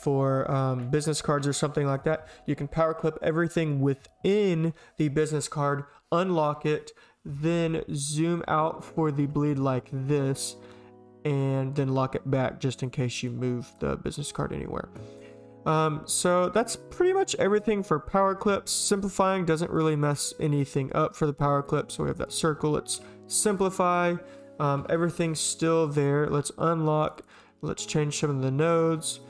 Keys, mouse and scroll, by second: 1.6 click, 7.9 shift+click, 9.9 shift+click, 13.2 click, 13.5 drag, 14.2 click, 16.2 click, 17.4 click, 17.8 click, 23.0 s, 23.8 click, 24.0 drag, 25.1 click, 26.6 click, 27.0 click, 27.1 click, 27.9 click, 29.1 click.